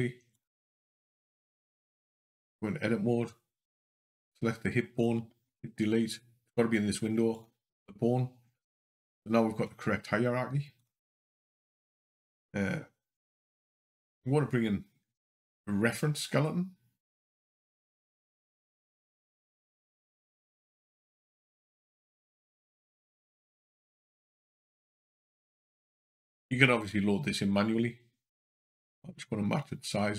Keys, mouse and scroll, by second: 0.2 click, 5.3 Delete, 10.6 click, 11.9 click, 17.5 click, 19.2 click, 20.5 shift+a, 28.5 s.